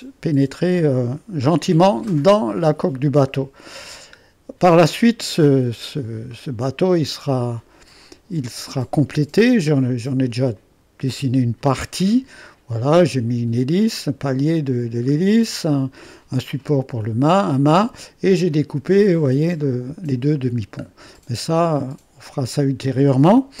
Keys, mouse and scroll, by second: 4.2-5.1 scroll down 2, 5.2-6.8 drag, 10.5-12.8 drag, 18.8-20.6 scroll up 1, 20.6-21.1 scroll down 1, 21.1-23.6 middle drag.